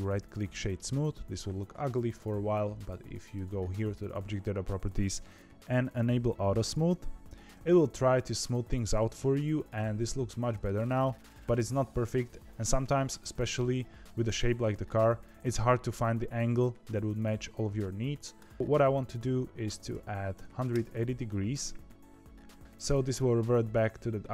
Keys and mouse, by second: 3.3 click, 5.2 click, 8.3 click, 9.1-10.6 middle drag, 18.3-21.2 drag.